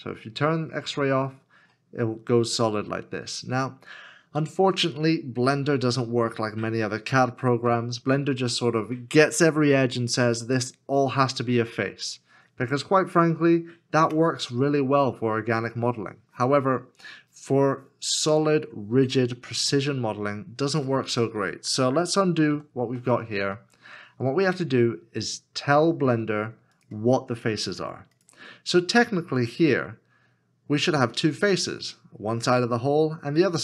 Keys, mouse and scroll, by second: 1.8 middle click, 22.1 middle click, 22.5 ctrl+z, 23.6 middle click, 26.5 scroll up 1.